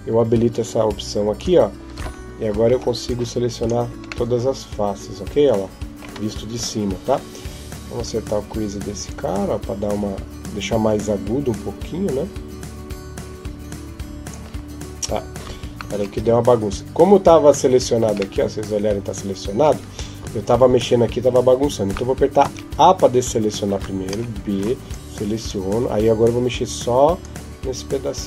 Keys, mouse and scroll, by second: 1.2 click, 2.5 b, 4.1 middle click, 6.4 KP_7, 7.9 click, 15.6 ctrl+z, 18.2 middle click, 20.0 KP_7, 22.3 a, 23.9 b, 27.0 click.